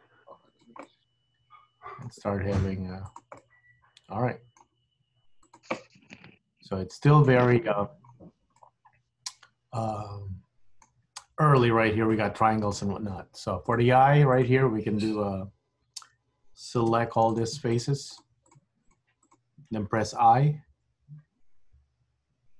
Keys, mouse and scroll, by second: 0.0 g, 0.9 middle click, 2.4 g, 3.4 middle click, 5.0 g, 5.9 middle click, 7.9 middle click, 8.7 middle click, 12.3 middle click, 13.8 click, 13.9 g, 16.9 3, 17.4 click, 17.8 shift+click, 18.2 shift+click, 18.5 click, 18.9 click, 19.3 click, 20.5 i.